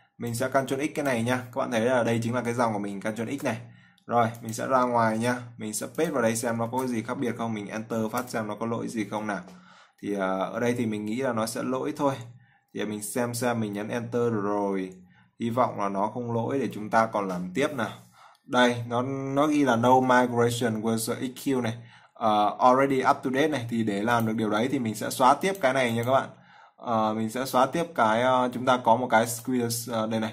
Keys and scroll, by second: 3.4 ctrl+x, 7.0 ctrl+v.